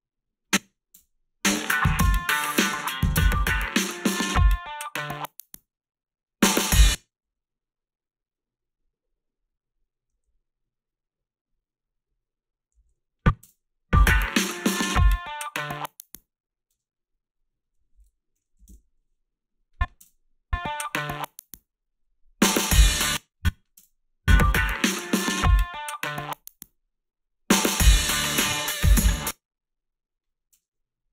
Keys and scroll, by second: 1.0 space, 6.6 space, 6.9 a, 7.2 s, 10.1 a, 12.8 a, 13.4 space, 16.7 space, 18.1-20.0 typing, 21.0 space, 22.9 space, 23.8 space, 29.0 space, 30.5 space.